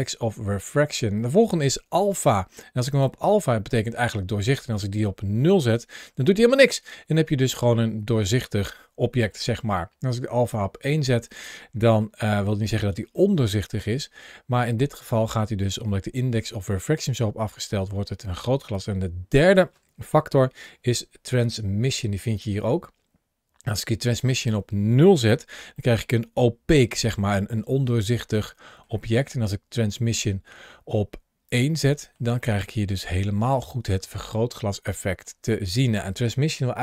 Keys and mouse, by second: 2.0 click, 5.3-9.2 middle drag, 10.4 click, 12.5 shift+middle click, 13.1-14.9 middle drag, 15.3 shift+middle click, 16.0 shift+middle click, 16.7 middle click, 22.2-24.3 drag, 25.7 shift+middle click, 26.1-28.7 middle drag, 29.6-31.3 drag, 31.7 shift+middle drag, 32.3-33.4 middle drag, 34.9 shift+middle click.